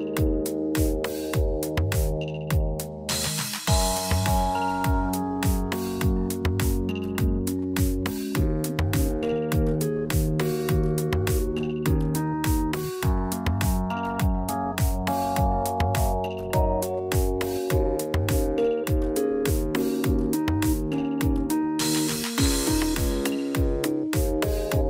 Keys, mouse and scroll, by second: 21.3 middle click, 21.3 scroll down 1, 22.0-22.6 typing, 24.7-24.8 scroll up 1.